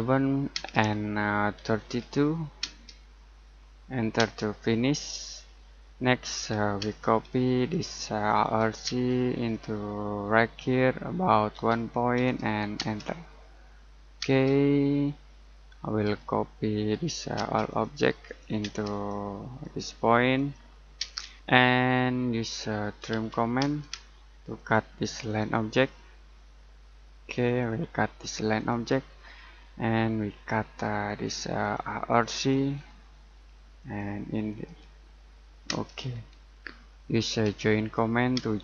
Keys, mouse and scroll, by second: 0.0-0.5 typing, 1.5-2.6 typing, 6.8 space, 7.5 click, 8.8 space, 9.3 click, 11.5 1, 12.7 space, 13.5 scroll up 1, 14.2 space, 14.7-15.4 scroll down 1, 15.4 middle click, 16.0-17.3 typing, 17.6 click, 18.6 space, 18.9 click, 20.9-21.3 typing, 21.4 middle click, 21.8-22.4 scroll up 1, 22.4 middle click, 22.7-23.6 typing, 24.5 click, 25.7-27.0 scroll up 1, 27.4 click, 31.0 click, 32.7-33.1 scroll down 1, 33.1 middle click, 33.7 click, 35.6 space, 36.1-36.5 scroll down 1, 36.5 middle click, 37.4 j, 38.3 space.